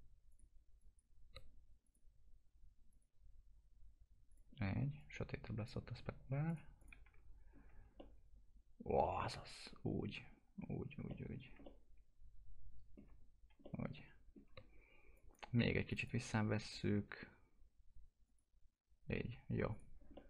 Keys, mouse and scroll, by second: 0.3 click, 7.0 F4, 7.5-7.8 scroll down 1, 8.0-10.3 alt+middle drag, 10.3-11.1 scroll up 1, 11.1 middle click, 11.4 scroll down 1, 11.6-13.6 middle drag, 13.6-15.1 alt+middle drag, 15.1 click, 20.1-20.2 alt+middle drag.